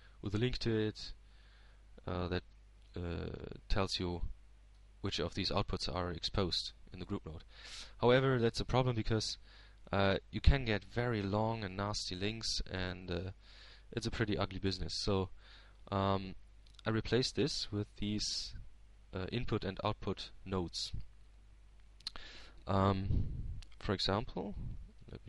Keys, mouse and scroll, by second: 0.6 click, 6.1 middle click, 7.4-8.9 drag, 19.6-20.8 drag, 21.5-23.6 drag, 24.9-25.2 drag.